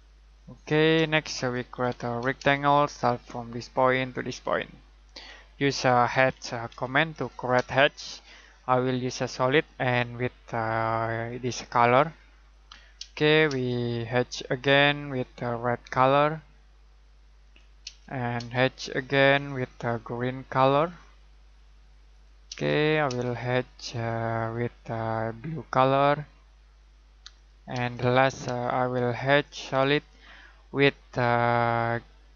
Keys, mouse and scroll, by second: 0.9-2.7 typing, 3.5 click, 5.8-7.5 typing, 9.6 click, 13.0 space, 14.6 click, 17.8 space, 19.3 click, 22.5 space, 23.9 click, 27.7 space, 29.2 click.